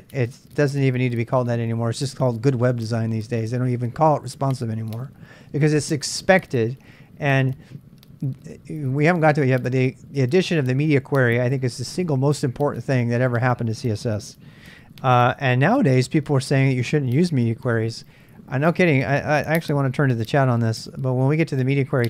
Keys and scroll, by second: 19.6 super+Tab, 19.8 super+Tab.